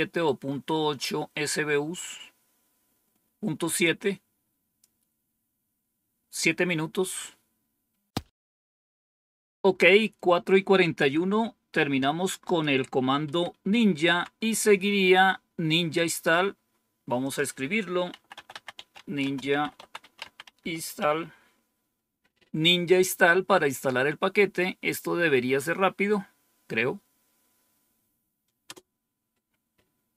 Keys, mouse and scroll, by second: 3.7-4.7 drag, 12.4 click, 13.2 Up, 14.0 Down, 17.2 click, 17.8-21.3 typing, 28.6 Return.